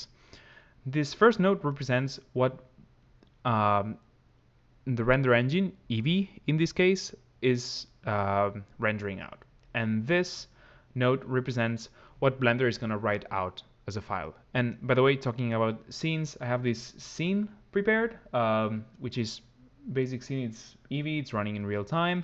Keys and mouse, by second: 2.4 click, 9.4 click, 10.5 click, 18.5 click, 19.8 click.